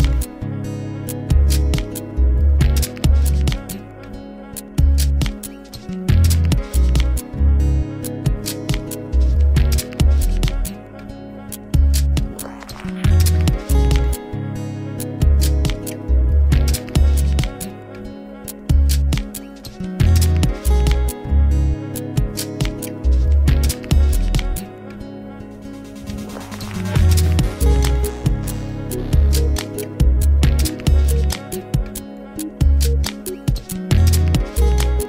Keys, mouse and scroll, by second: 1.6-3.6 middle drag, 3.6-5.2 right drag, 5.2-6.0 middle drag, 6.0 Tab, 6.3-8.4 middle drag, 8.4 ctrl+r, 10.5 Tab, 11.2-13.3 middle drag, 13.3 a, 13.5 a, 13.7-14.2 scroll down 2, 14.2-14.7 middle drag, 14.7 click, 15.3 click, 16.9 click, 18.0 click, 19.2-20.4 drag, 22.2 click, 23.2-25.9 drag, 25.9-27.0 scroll down 1, 27.0-28.3 scroll down 1, 28.5 click, 28.7 click, 30.3-33.4 drag, 33.4-34.0 scroll down 2, 34.6-35.0 scroll down 1.